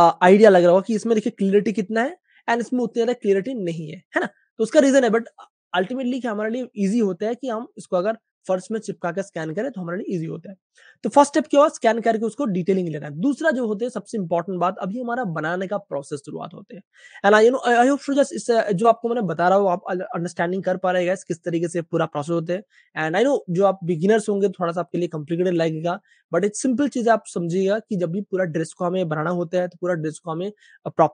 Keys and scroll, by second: 0.9 space, 2.4 super+space, 3.4 super+space, 3.4 typing, 5.3 typing, 19.1 Page_Up.